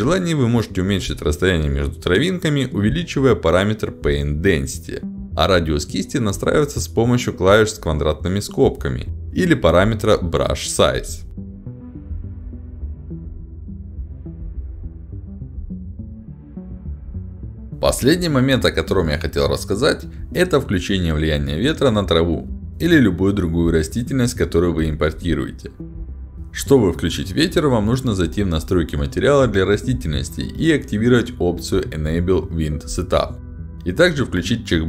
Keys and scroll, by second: 2.6 e, 2.9 w, 6.8 w, 13.2 ], 15.8 a.